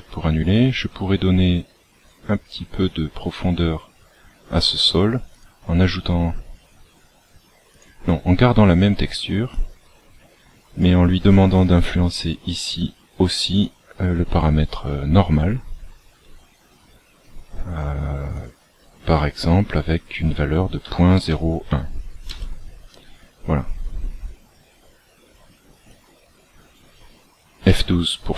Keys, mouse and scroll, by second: 1.5-2.5 scroll up 9, 5.3 click, 7.6 click, 13.5 click, 18.3 click, 25.8 click.